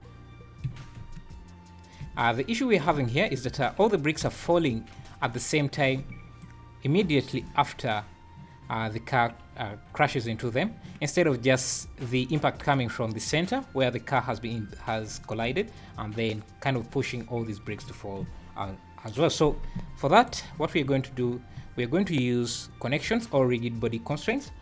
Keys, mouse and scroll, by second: 0.7 Escape, 1.0 space, 2.1 Escape, 2.3 scroll up 4, 2.9 space, 3.6 Escape, 4.3 space, 5.0 Escape, 6.4 shift+right click, 20.2 shift+right click, 20.7 scroll down 6, 20.8 `, 21.3 scroll up 3, 21.5 `, 22.1-22.5 scroll up 3, 23.0 click.